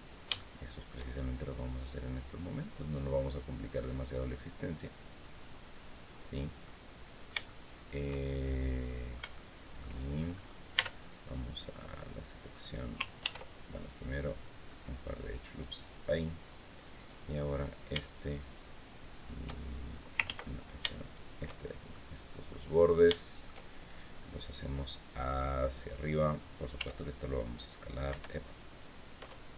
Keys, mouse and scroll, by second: 0.1 shift+middle click, 1.4 click, 3.0-4.3 drag, 4.9 click, 6.1 scroll down 2, 6.4-9.7 middle drag, 9.8-10.4 shift+scroll up 3, 10.5 Tab, 13.0 ctrl+r, 14.4 scroll up 2, 15.2 click, 15.6 click, 16.8 right click, 18.6 shift+right click, 19.3 shift+scroll down 2, 20.0 ctrl+z, 20.6 ctrl+shift+z, 20.8 shift+right click, 21.7 shift+middle click, 22.5 scroll down 2, 22.9 shift+click, 24.3-25.8 drag, 26.5 s, 27.8 Escape.